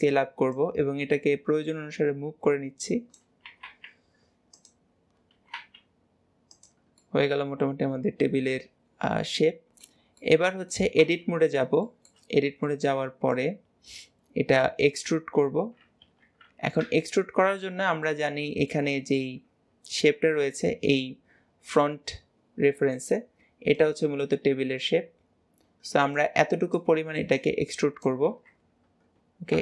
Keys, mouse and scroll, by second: 0.6 click, 7.0-10.1 middle drag, 10.2-11.1 middle drag, 11.1 Tab, 11.5-11.9 scroll down 1, 11.9 shift+middle click, 12.4 scroll down 1, 12.7-15.8 middle drag, 18.1-28.6 middle drag.